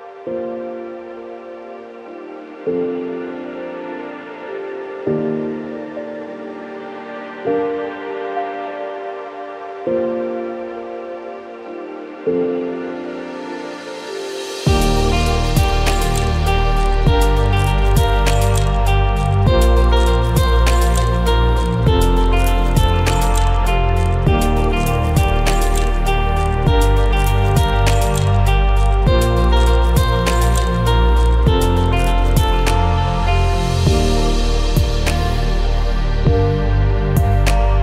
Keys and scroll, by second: 0.2 ctrl+f, 0.6 ctrl+shift+a, 5.0 ctrl+e, 9.8 ctrl+shift+a, 14.3 ctrl+shift+a, 14.8 Delete, 17.3 ctrl+c, 17.4 ctrl+f, 20.5 ctrl+shift+a, 24.2 ctrl+shift+a, 24.7 Delete, 28.2 ctrl+c, 28.2 ctrl+f, 31.3 ctrl+shift+a, 36.0 ctrl+shift+a, 36.6 Delete.